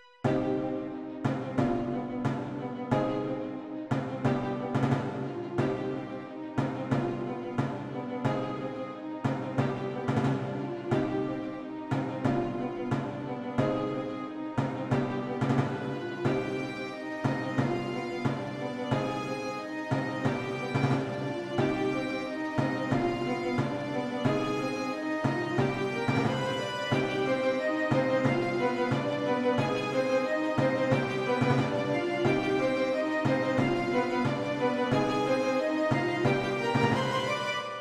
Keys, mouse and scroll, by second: 0.9 click, 8.1 click, 20.3 click, 25.6 click, 33.0 click, 35.2 alt+scroll down 1, 35.7-36.5 scroll down 1.